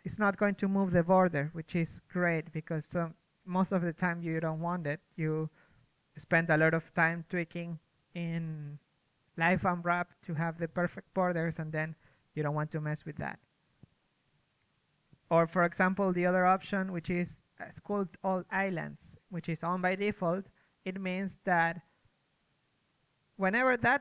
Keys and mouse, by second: 1.0 ctrl+z, 4.0-6.8 middle drag, 7.6 ctrl+z, 10.6 middle click, 12.2 ctrl+z, 12.9-15.3 drag, 16.0 ctrl+z, 16.4 f, 16.8-19.0 drag, 18.1 ctrl+z, 19.8 ctrl+z, 23.7 ctrl+z.